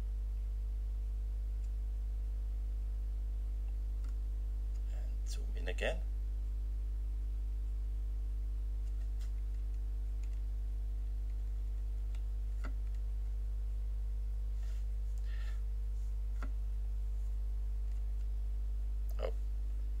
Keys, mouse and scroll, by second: 4.7 F10, 9.5 Up, 10.2 Down, 17.9 F5.